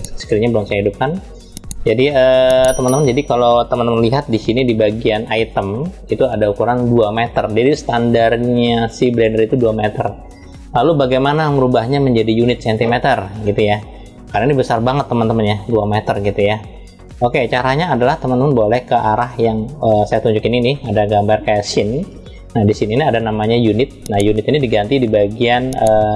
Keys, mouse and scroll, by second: 5.2 click, 15.3 click, 15.8 click, 21.9 click, 23.7 click.